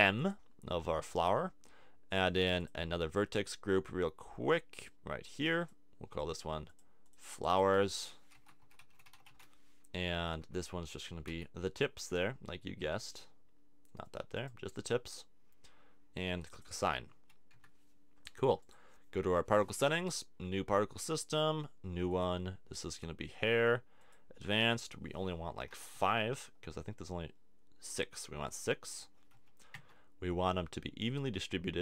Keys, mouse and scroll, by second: 0.2-2.0 drag, 2.0 middle click, 2.6-9.3 drag, 10.4 Tab, 11.3 c, 16.5 click, 17.1 a, 17.5 Tab, 26.4-28.9 middle drag.